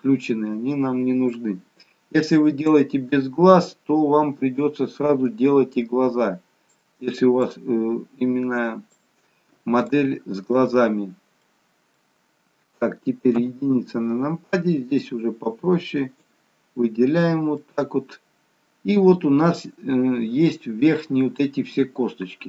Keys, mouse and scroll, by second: 2.9 shift+click, 11.6 middle click, 13.7 KP_1, 15.2 shift+click, 17.8 middle click.